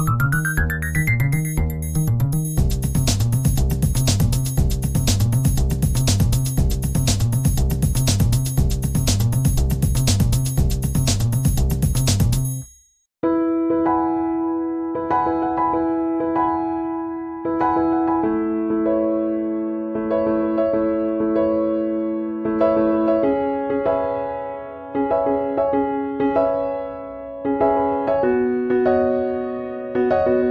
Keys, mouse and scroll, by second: 0.7 click, 2.8 click, 4.1 click, 5.7-9.7 drag, 12.2-15.5 drag, 16.7 click, 18.1 click, 20.3-25.3 drag, 26.8-29.3 drag.